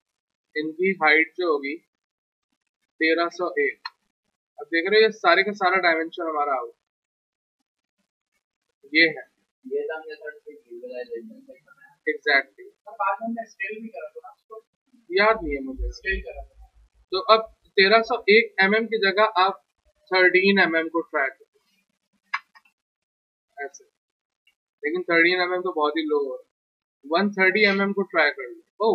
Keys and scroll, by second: 2.8-3.9 typing, 19.7 shift+Right, 20.3 shift+Right, 21.0 shift+Right, 21.6 shift+Right, 22.2 Delete, 24.5 z.